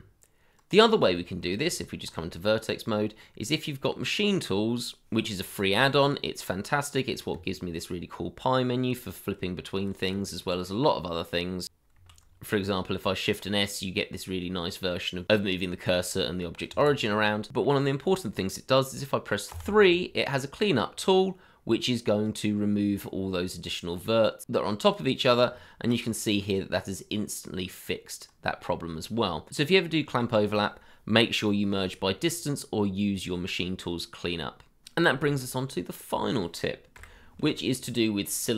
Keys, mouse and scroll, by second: 1.2 shift+middle click, 1.6 Tab, 2.4-3.6 scroll up 1, 7.3 Tab, 12.2 shift+s, 16.7 Escape, 18.0 middle click, 19.5 3, 25.6 shift+middle click, 26.0 scroll up 1, 26.6 middle click, 28.8-29.2 scroll down 1, 29.2 Tab, 29.7 scroll down 1, 30.8 shift+z, 31.4 middle click, 31.5 shift+middle click, 32.0 shift+z, 32.7 middle click, 35.1 shift+a.